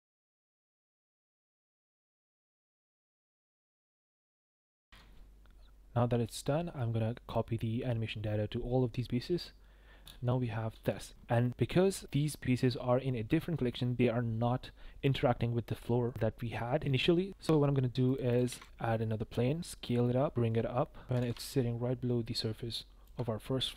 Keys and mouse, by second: 0.3 click, 1.6-2.2 drag, 2.2 i, 2.3 i, 3.2 click, 3.7 click, 3.9 i, 4.0 i, 4.3 click, 4.8 ctrl+l, 10.7 space, 11.4 click, 17.3 shift+a, 18.0 click, 18.5 shift+a, 19.6 s, 20.3 g, 21.2 g, 21.2 z, 23.0 shift+click.